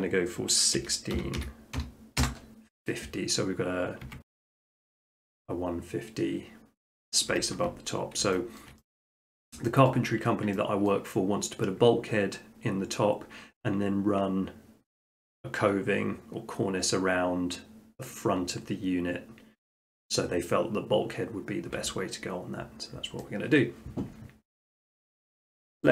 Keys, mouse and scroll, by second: 0.8-1.8 typing, 2.2 Return, 4.1 Tab, 4.2 click, 7.3 Escape, 7.6 middle click, 7.8 middle click, 8.6 shift+middle click, 8.7 shift+middle click, 9.2 middle click, 9.9 shift+middle click, 10.0 middle click, 10.2 middle click, 10.6 shift+middle click, 10.9 middle click, 11.1 middle click, 23.6-24.7 middle drag.